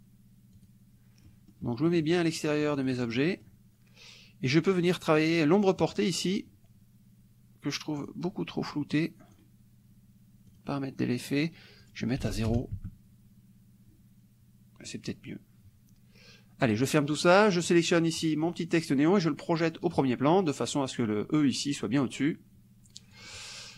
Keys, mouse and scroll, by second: 0.7 click, 1.3-2.3 middle drag, 2.7 click, 3.2 middle click, 3.6 click, 8.0 click, 9.0 click, 10.5 click, 11.9 click, 12.3 ctrl+a, 12.5 ctrl+KP_0, 12.8 ctrl+Tab, 16.7 click, 17.8 click, 20.0 click, 23.2 click.